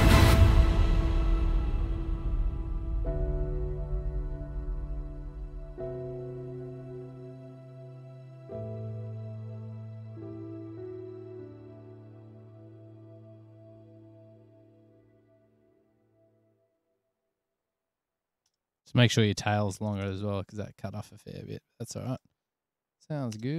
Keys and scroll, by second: 19.2 super+s, 19.4 super+s, 19.6 super+s, 20.0 Return.